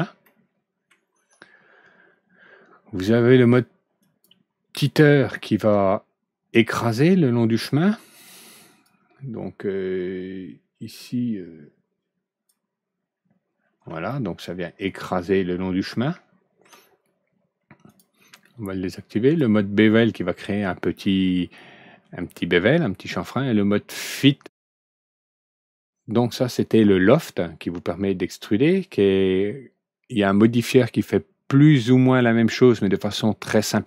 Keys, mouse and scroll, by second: 0.2 middle click, 1.0 scroll down 1, 3.9 click, 8.1 click, 8.6 click, 10.8-12.4 drag, 13.8 alt+Right, 14.0-16.6 middle drag, 17.8 click, 19.2 click.